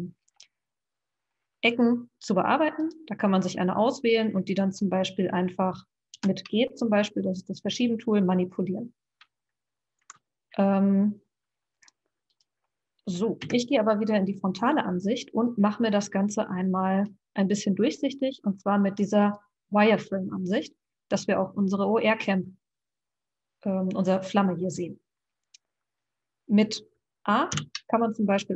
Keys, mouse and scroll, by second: 2.8 click, 6.1 g, 12.3 click, 13.4 KP_1, 15.3 click, 19.3 click, 22.0-23.2 scroll up 1, 27.5 a.